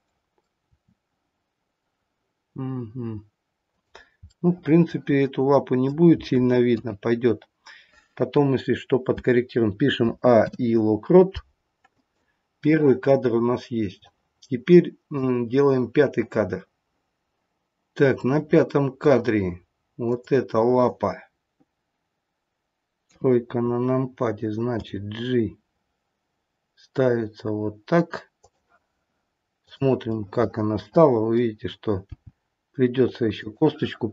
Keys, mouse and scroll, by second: 0.5 r, 4.3 middle click, 4.9 middle click, 5.2 middle click, 6.6 KP_3, 10.0 a, 10.3 i, 14.0 click, 18.2 middle click, 20.0 click, 23.0 KP_3, 24.8 g, 29.6 click, 30.1 middle click, 32.0 g.